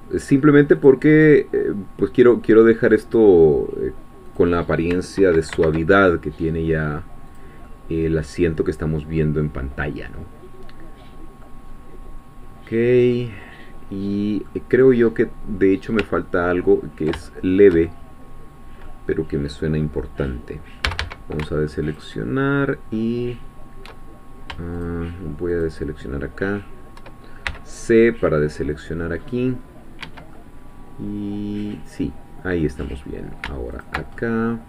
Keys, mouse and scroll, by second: 0.8 click, 1.1-3.1 middle drag, 4.4 click, 5.5 ctrl+b, 7.3 click, 7.7-11.6 middle drag, 11.6-13.1 scroll down 1, 13.1-14.8 middle drag, 14.8-15.7 scroll down 2, 15.7 scroll up 2, 16.2-19.0 ctrl+middle drag, 20.9 a, 22.0 alt+shift+click, 24.7 shift+click, 25.6-27.0 shift+drag, 27.5 c, 28.0-29.4 drag, 30.0 Escape, 30.3-33.2 drag, 33.8 alt+shift+click, 34.2 alt+shift+click.